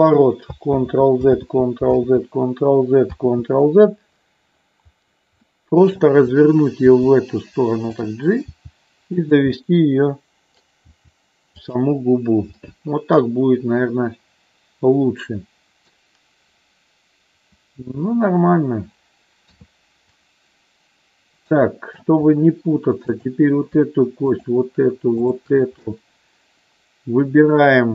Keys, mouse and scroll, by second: 0.6 ctrl+z, 1.2 ctrl+z, 1.8 ctrl+z, 3.3 ctrl+z, 5.5 middle click, 6.9 r, 7.9 click, 8.5 g, 9.1 click, 9.6-10.7 middle drag, 10.8 g, 11.5 click, 12.5-16.0 middle drag, 19.3 KP_3, 21.5 middle click, 23.1 click, 24.4 shift+click, 25.9-27.7 middle drag.